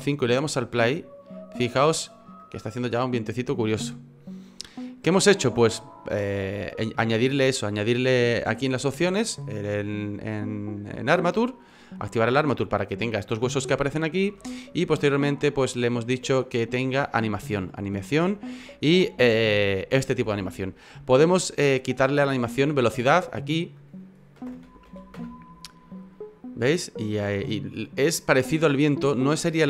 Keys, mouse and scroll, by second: 0.8 click, 2.3 middle click, 8.3 F9, 14.3 F9.